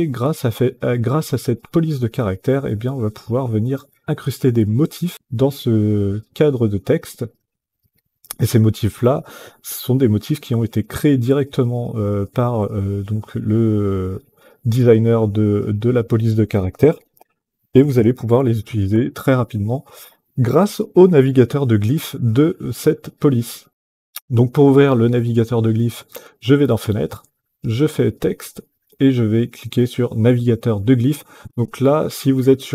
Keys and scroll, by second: 23.6 F9.